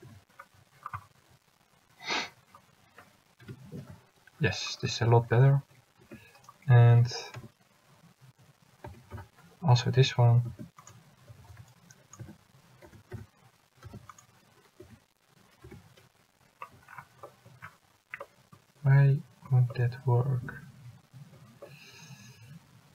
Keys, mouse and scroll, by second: 0.2 a, 3.6 l, 6.1 a, 7.5 l, 9.1 s, 11.4 a, 11.8 c, 13.1 s, 15.0 a, 15.8 l.